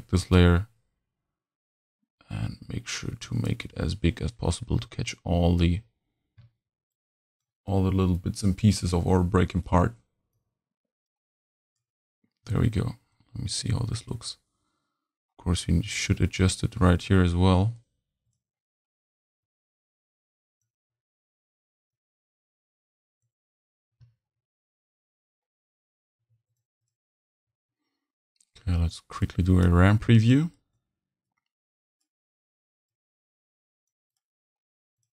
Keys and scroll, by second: 26.2 v.